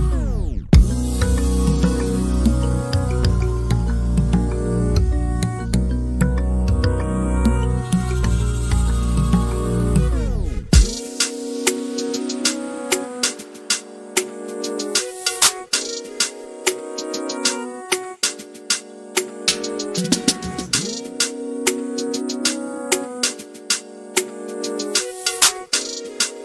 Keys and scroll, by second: 3.4-4.6 typing, 6.8-9.9 typing, 11.9 m, 14.1-18.5 typing, 20.3 m, 22.2-26.4 typing.